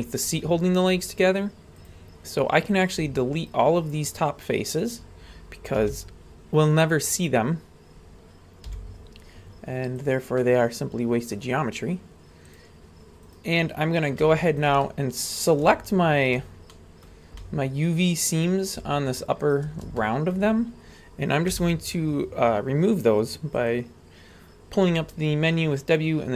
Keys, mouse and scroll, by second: 1.8 click, 2.8 right click, 3.4-4.8 shift+right drag, 5.8 w, 8.7 x, 10.4-11.4 middle drag, 12.5 click, 13.3 right click, 13.5 middle click, 14.5 shift+right click, 14.8 middle click, 16.2 shift+right click, 16.7 middle click, 17.4-18.5 middle drag, 19.5 shift+right click, 20.0-20.3 shift+middle drag, 20.6 scroll up 2, 21.5 w.